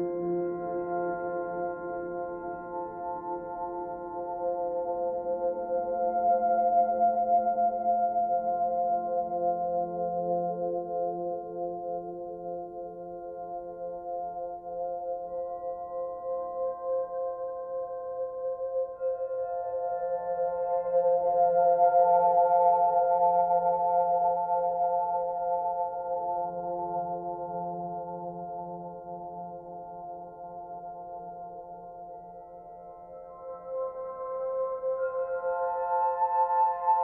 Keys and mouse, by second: 0.5 click, 3.0 click, 4.0 click, 5.3 shift+click, 6.6 ctrl+z, 6.8 ctrl+z, 7.3 ctrl+z, 7.6 ctrl+z, 7.9 ctrl+z, 8.5 ctrl+z, 10.4 /, 11.4 alt+click, 11.9 alt+click, 12.6 ctrl+alt+shift+click, 13.2 ctrl+alt+click, 13.6 ctrl+alt+click, 15.3-16.6 drag, 16.9-17.6 drag, 17.6 middle click, 17.7-18.4 drag, 19.5 middle click, 19.6-20.3 drag, 21.3-22.3 drag, 22.9-25.1 alt+drag, 25.4 Tab, 26.4 Tab, 27.0 alt+click, 29.0-30.6 alt+drag, 34.0-37.0 drag.